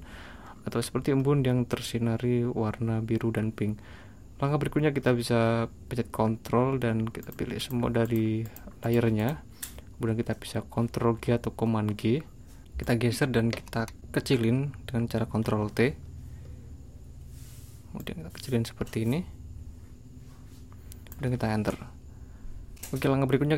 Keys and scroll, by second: 11.1 super+g, 15.3 super+t.